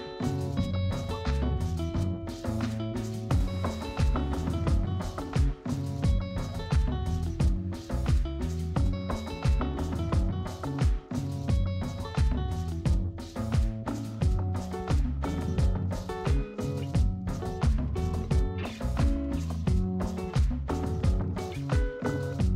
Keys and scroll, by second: 2.9 space, 19.0 space.